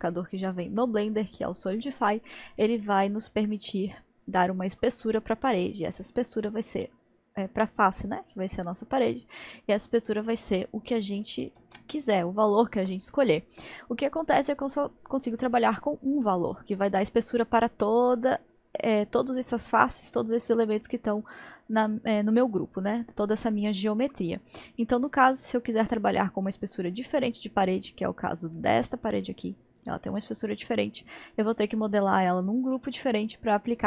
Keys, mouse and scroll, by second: 0.5 click, 3.3-11.3 drag, 11.6 ctrl+z, 28.1-31.1 drag.